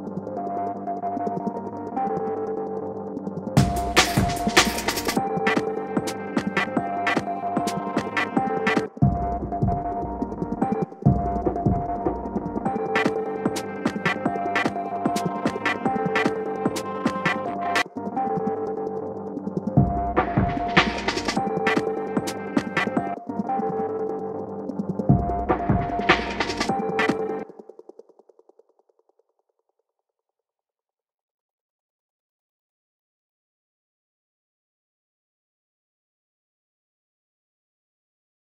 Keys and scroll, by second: 34.3 shift+BackSpace.